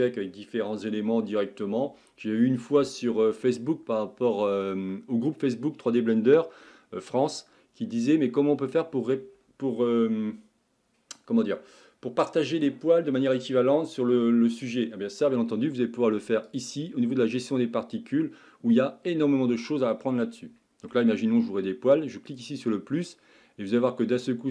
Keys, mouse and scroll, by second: 15.8-22.4 middle drag, 22.4-23.3 drag, 23.3-24.5 scroll up 2.